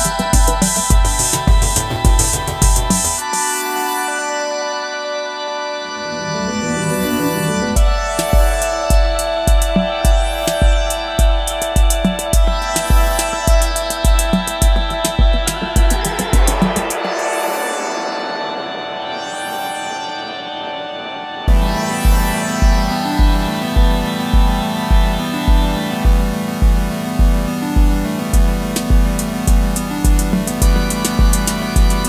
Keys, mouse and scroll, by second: 1.5 scroll down 1, 3.1 ctrl+-, 3.4 ctrl+-, 5.1-5.7 alt+scroll down 1, 5.7-6.6 alt+scroll up 1, 7.1 alt+click, 8.8 alt+click, 12.1 alt+click, 13.9 alt+click, 16.0-16.3 alt+scroll up 1, 17.1 space, 20.7 double click, 24.3 alt+BackSpace, 25.8 ctrl+d, 27.9 ctrl+-, 28.7-29.5 scroll up 1, 29.5 alt+scroll down 1.